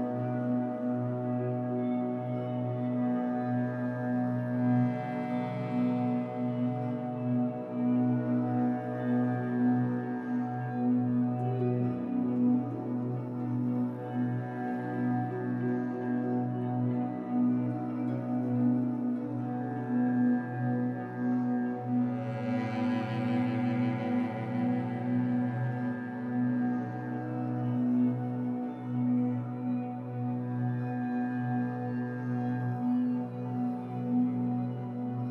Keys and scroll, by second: 6.4 Escape, 16.7 3, 20.7 Escape, 21.8 2, 23.2 alt+c, 24.7 b, 31.5 Escape, 31.7 3.